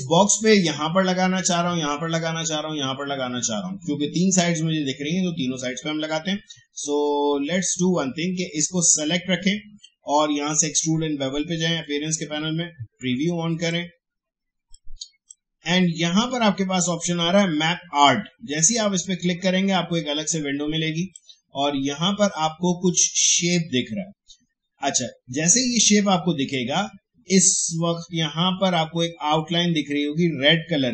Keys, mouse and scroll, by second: 10.9 click, 11.7-17.7 drag, 18.8-23.5 drag.